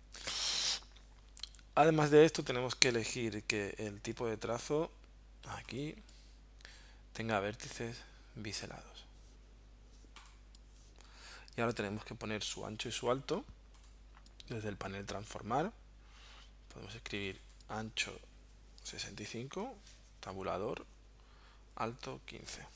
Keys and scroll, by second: 19.3-20.2 typing, 20.3 Tab, 22.4-22.7 typing.